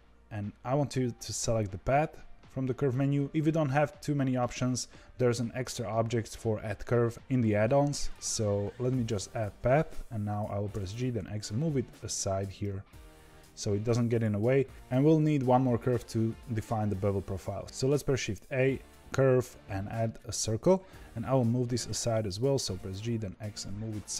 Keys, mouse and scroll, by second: 18.1 shift+a, 21.4 g.